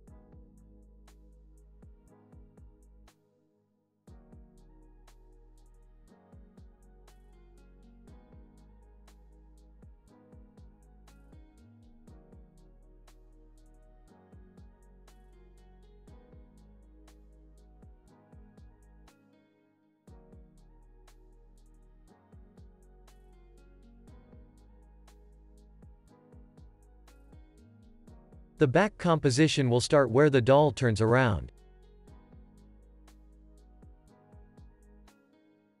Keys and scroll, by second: 0.2 alt+], 0.6 super+s, 1.3 alt+x, 1.7 alt+z, 9.0 z, 14.8 space, 15.9 space, 18.6 space, 25.1 alt+], 25.5 super+s, 26.0 alt+z, 26.3 alt+x, 31.1 [, 32.0 alt+z, 32.3 alt+x, 34.5 space.